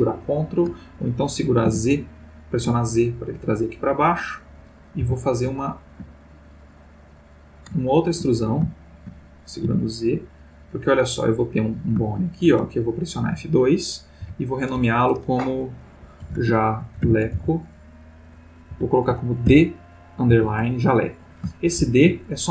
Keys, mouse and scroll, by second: 1.6 z, 3.9 click, 5.0 e, 9.7 z, 10.6 click, 11.3 click, 12.1-13.5 shift+middle drag, 14.2 F2, 16.2-17.3 typing, 19.5 shift+d, 20.3 shift+-, 21.6 shift+Left.